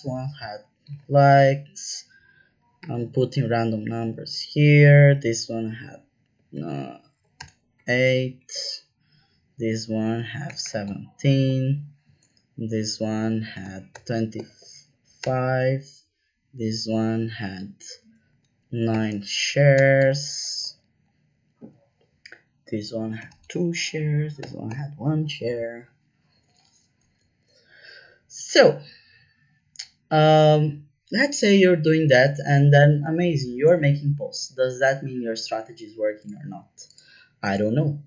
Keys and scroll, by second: 0.0 Right, 0.8 KP_1, 1.3 Right, 2.8 KP_8, 2.8 KP_0, 3.4 Down, 3.8 Left, 4.0 Left, 6.5 KP_1, 7.3 BackSpace, 7.7 KP_8, 8.3 Right, 10.4 KP_1, 10.6 KP_7, 10.8 Down, 11.4 Up, 11.7 Right, 13.5 KP_2, 13.9 KP_5, 14.3 ', 15.2 BackSpace, 15.4 Return, 18.2 KP_9, 18.8 ', 19.7 BackSpace, 19.9 Return, 20.4 Left, 20.6 Up, 23.2 KP_2, 23.6 Left, 24.3 KP_1, 24.6 Return.